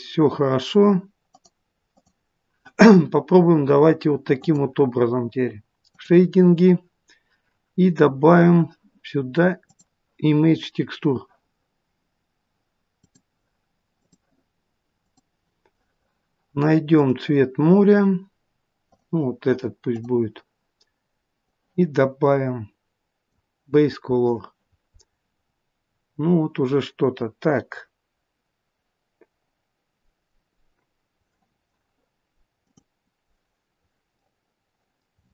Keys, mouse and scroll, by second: 1.4 click, 2.1 click, 33.0 click, 34.3 middle click.